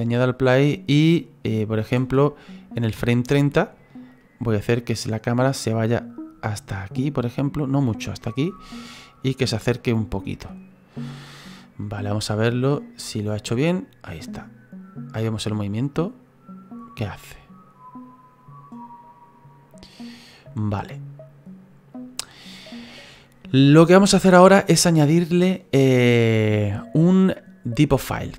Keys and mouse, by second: 2.0 space, 4.2 middle click, 8.9 ctrl+middle click, 12.0 click.